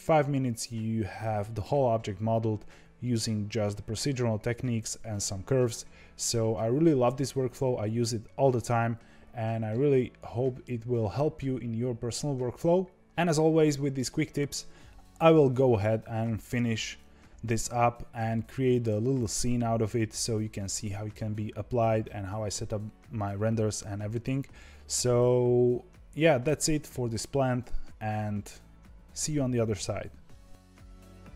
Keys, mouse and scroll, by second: 9.6-12.7 middle drag, 30.7 scroll down 2, 30.9 middle click, 31.0-31.3 typing.